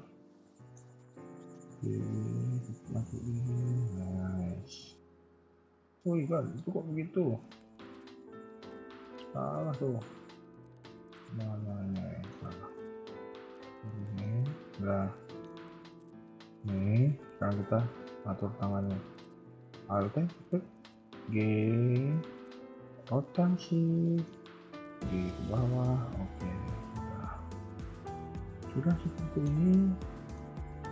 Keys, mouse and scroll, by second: 0.0 KP_3, 0.5 shift+middle click, 0.8 scroll up 2, 1.5 g, 3.8 KP_1, 4.4 scroll down 1, 4.8 KP_3, 5.5 shift+middle click, 5.8 middle click, 7.0 click, 7.2 KP_3, 8.1 g, 10.2 KP_1, 10.7 scroll down 1, 10.7 middle click, 12.5 g, 13.5 KP_1, 14.0 shift+middle click, 14.4 middle click, 15.5 KP_1, 18.6 a, 18.8 a, 20.0 alt+click, 20.9 g, 22.3 r, 24.0 shift+middle click, 24.7 g, 25.9 middle click, 29.5 KP_1, 30.0 shift+middle click, 30.4 scroll up 2, 30.8 Tab.